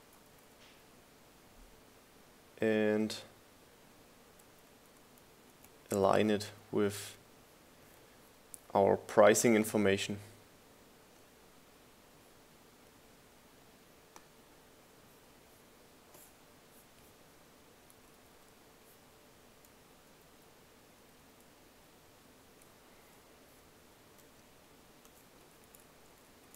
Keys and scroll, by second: 0.0 Down, 1.5 Down, 2.3 Up, 6.5 Up, 7.3 Left, 7.7 Down, 7.9 Left, 8.7 Up, 9.1 Down, 20.4 Up, 21.6 Up, 22.5 Up, 23.3 Down, 24.1 Up.